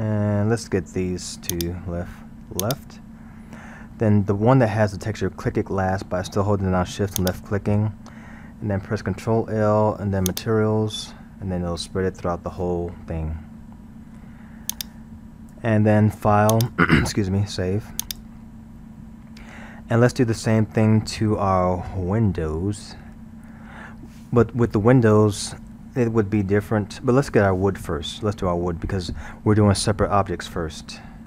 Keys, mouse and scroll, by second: 1.5 shift+click, 2.7 shift+click, 3.2-7.0 shift+middle drag, 7.2 shift+click, 9.1 ctrl+l, 11.8-12.2 scroll, 14.7-19.6 drag, 30.2-31.2 middle drag.